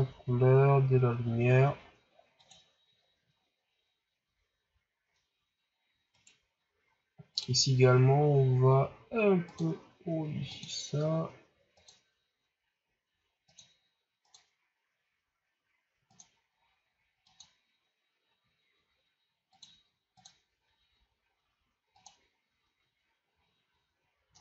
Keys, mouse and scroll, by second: 6.1 right click, 7.5 click.